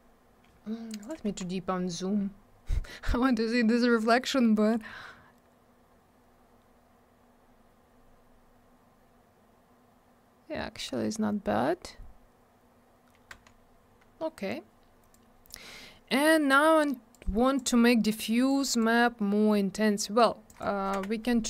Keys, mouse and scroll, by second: 1.0 click, 1.1 click, 1.9 scroll up 1, 3.0 middle click, 3.1 middle click, 3.7 scroll up 1, 5.5 scroll down 1, 8.1-9.2 scroll up 1, 9.2-10.3 scroll down 1, 10.3-11.0 scroll up 1, 11.0 scroll down 1, 12.0 scroll up 1, 12.7-13.2 scroll down 1, 15.1 click, 17.1 click, 18.5 click, 20.5 click, 20.6 click, 21.0 m.